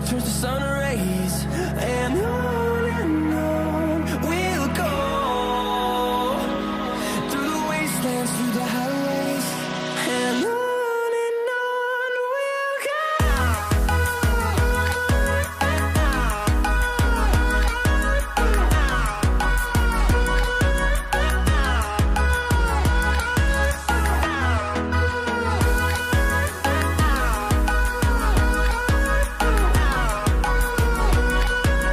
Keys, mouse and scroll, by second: 1.7 typing, 7.8 alt+right click, 11.1 alt+right click, 11.6 double click, 16.9 v, 21.6-23.2 scroll up 1, 23.2 double click, 24.0 ctrl+t, 25.6 alt+click, 26.4 ctrl+z, 26.8 Return, 27.3 double click, 27.5 typing, 29.5-30.7 typing.